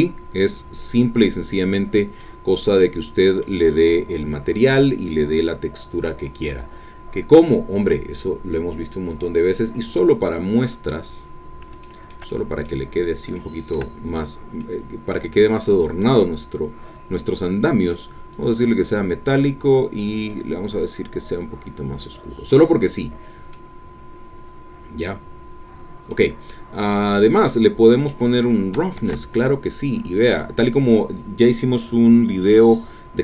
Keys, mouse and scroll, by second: 2.8 middle click, 9.8 click, 11.8-12.9 shift+middle drag, 13.4 shift+middle click, 14.6-16.2 middle drag, 18.3 click, 20.2 click, 20.8-21.2 scroll down 2, 21.4-22.1 scroll down 2, 22.1 scroll down 1, 23.5 middle click, 23.6-26.3 drag, 26.3 middle click, 26.5-27.6 middle drag, 28.9 shift+middle click, 28.9 shift+a.